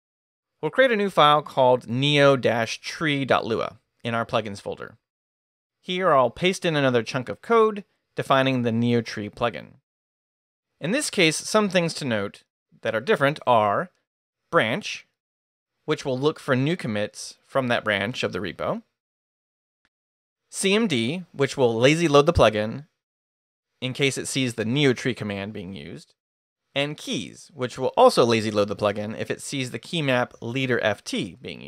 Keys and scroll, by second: 5.2 Return, 6.6 i, 7.1 super+v, 7.8 super+Escape.